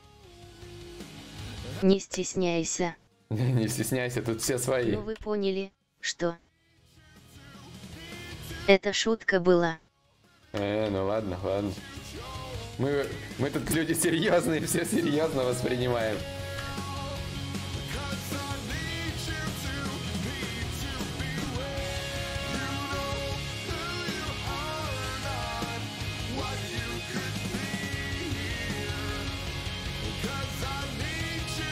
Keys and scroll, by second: 9.3 ctrl+z.